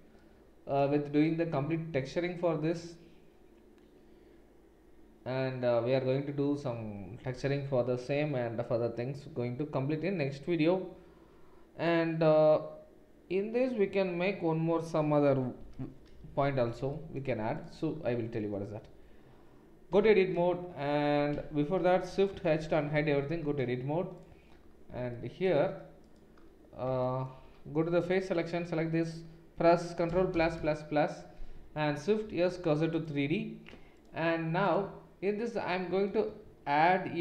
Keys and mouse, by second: 1.9 Tab, 15.8 Tab, 17.5 click, 19.9 Tab, 21.3 Tab, 22.5 shift+h, 22.9 Tab, 24.1 click, 27.6 3, 28.0 click, 30.1 ctrl+KP_Add, 30.3 ctrl+KP_Add, 30.5 ctrl+KP_Add, 32.2 shift+s, 33.9 click, 34.0 middle click, 34.6 click, 35.0-37.2 middle drag, 36.4 shift+a.